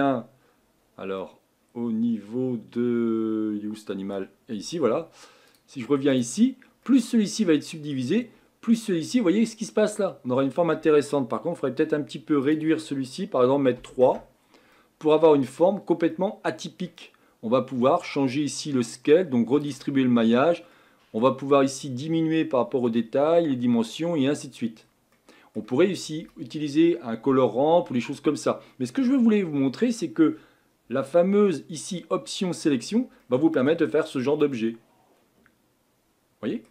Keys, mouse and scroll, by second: 5.6-6.8 drag, 6.8-8.3 middle drag, 8.3-8.9 scroll up 2, 8.9-10.3 scroll down 1, 10.3-14.2 scroll down 1, 14.2 click, 14.7 middle click, 15.4-16.1 scroll up 2, 16.1-18.6 middle drag, 18.6-33.2 drag, 33.2 middle click, 33.9-34.5 scroll down 3, 34.5-36.7 middle drag.